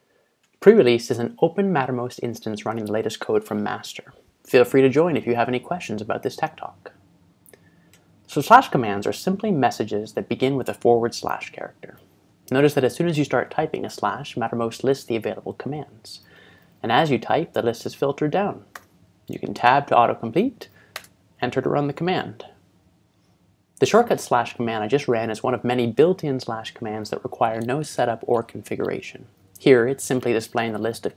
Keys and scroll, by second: 11.9 /, 16.2-17.2 typing, 21.0 Return.